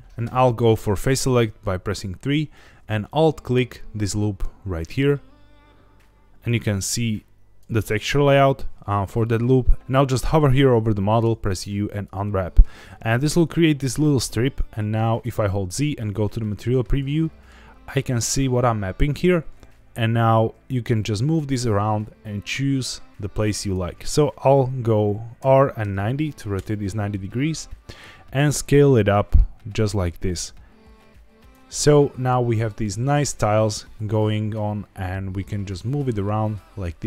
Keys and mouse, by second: 0.0 n, 0.2 3, 3.1 alt+click, 7.3-7.7 drag, 9.8 ctrl+z, 11.2 u, 15.2 z, 17.2 middle click, 20.3 g, 23.6 click, 25.4 r, 25.8 KP_9, 25.9 KP_0, 26.5 KP_Enter, 28.0 s, 29.9 click, 30.1 g, 31.4 click, 31.9 middle click, 33.9 g, 34.2 x.